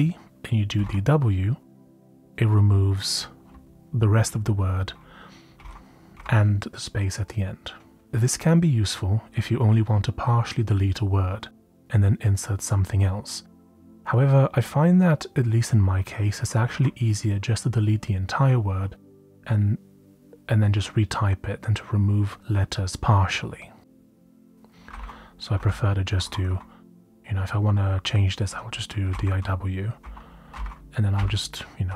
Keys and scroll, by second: 0.0-1.2 typing, 4.3-6.1 typing, 13.6-15.4 typing, 18.2 typing, 24.5-27.0 typing, 28.7-31.9 typing.